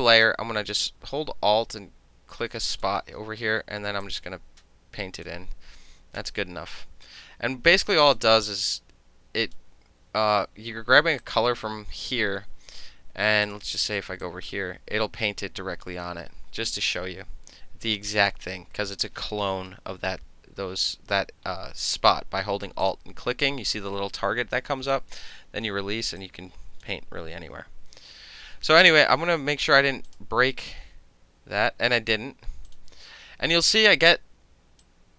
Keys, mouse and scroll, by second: 2.8 alt+click, 4.1-5.3 drag, 8.1 alt+click, 8.8 click, 11.3 alt+click, 13.5 click, 14.3-15.9 drag, 16.5 ctrl+z, 22.9 alt+click, 26.2 alt+click, 27.4 ctrl+z, 30.1 click, 32.7 click, 34.9-35.1 drag.